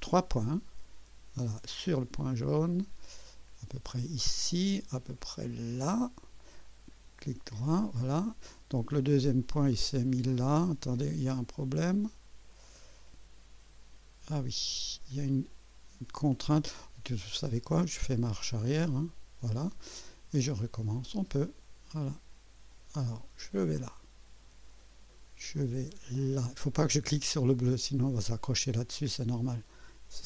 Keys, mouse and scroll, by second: 1.7 click, 4.2 click, 6.0 click, 6.6 right click, 8.2 right click, 9.2-11.0 drag, 12.6-13.6 drag, 17.6 click, 18.1 click, 18.7 click, 20.8 click, 23.4 click, 28.2 click.